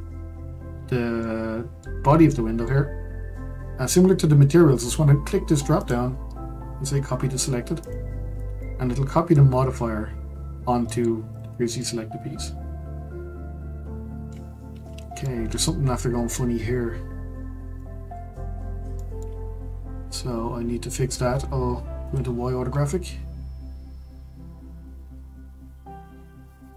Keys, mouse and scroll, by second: 1.2-5.4 middle drag, 5.8-8.6 drag, 8.6-11.3 middle drag, 11.3 click, 11.8-14.5 middle drag, 14.5-15.2 scroll up 2, 15.2-17.4 shift+middle drag, 17.4-17.8 scroll down 4, 17.8 shift+middle click, 18.6-19.0 scroll up 3, 19.0-22.0 shift+middle drag, 22.0 click, 22.6-25.0 scroll up 4.